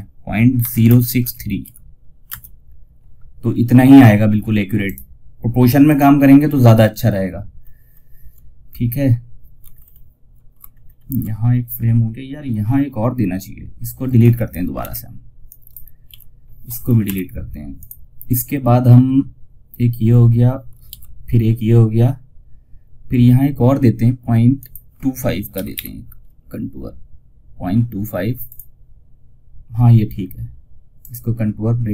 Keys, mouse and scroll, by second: 4.1 right click, 5.1 click, 6.9-7.2 ctrl+scroll down 1, 8.0 scroll down 1, 9.0 ctrl+scroll down 1, 10.0 alt+scroll down 1, 13.5 click, 15.4 ctrl+z, 17.1 click, 20.2 ctrl+z, 23.9 click, 27.7 click, 30.3 right click, 31.5 click.